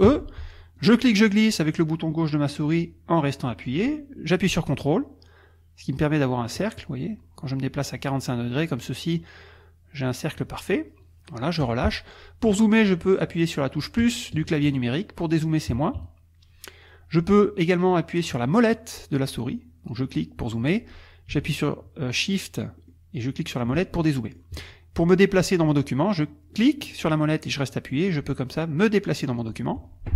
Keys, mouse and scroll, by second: 0.1 e, 0.8-11.8 drag, 14.0 KP_Add, 15.7 KP_Subtract, 19.9-21.3 scroll up 4, 21.6-22.1 shift+scroll down 2, 22.8 shift+click, 23.9 shift+click, 24.4-25.7 shift+drag, 26.5-30.1 drag.